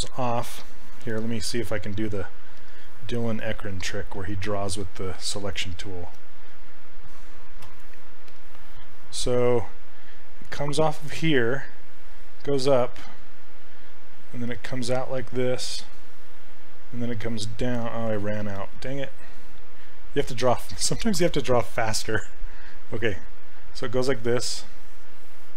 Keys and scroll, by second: 18.7 ctrl+z.